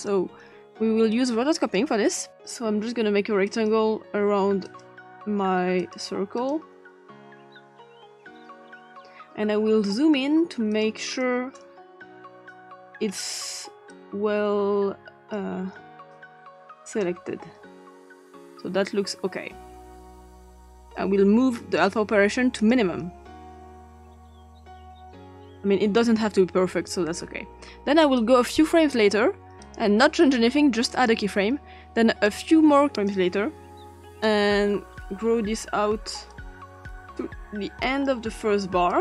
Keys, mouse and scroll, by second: 0.0 click, 1.1 click, 3.5 click, 4.7 click, 5.8 click, 6.4 click, 7.5 click, 10.7 click, 11.1 click, 12.5 click, 13.9-15.4 drag, 16.1 click, 18.0-19.1 drag, 21.8 click, 22.6 click, 24.6-26.0 drag, 28.0 click, 29.6 click, 30.9 click, 32.3 click, 33.9 click, 35.1 click, 36.5-37.7 drag, 38.2 click.